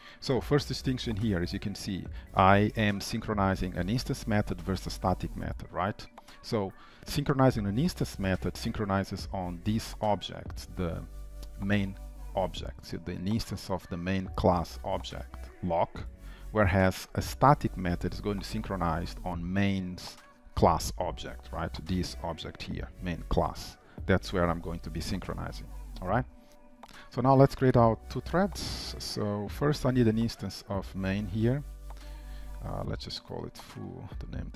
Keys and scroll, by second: 23.7 Return, 25.9 ctrl+s, 28.0 shift+Return.